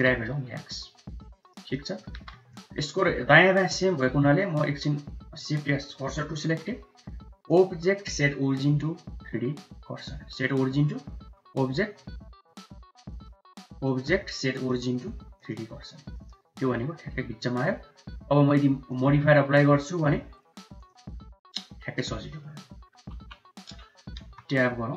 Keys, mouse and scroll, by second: 1.6 middle click, 2.0 2, 4.1 shift+s, 6.2 Tab, 7.5-12.9 drag, 13.9-15.5 drag, 16.5 g, 19.0-22.0 drag, 22.0-22.3 middle drag, 23.0 KP_1, 24.1 Tab, 24.8 1.